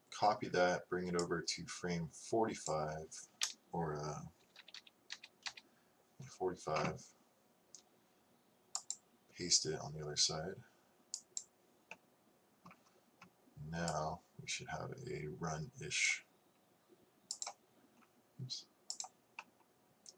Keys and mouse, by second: 1.4-3.3 drag, 4.5 Left, 4.7 Left, 5.2 Left, 5.5 Left, 11.4 click, 14.0-15.6 drag, 19.0 click, 19.2 click, 19.4 click.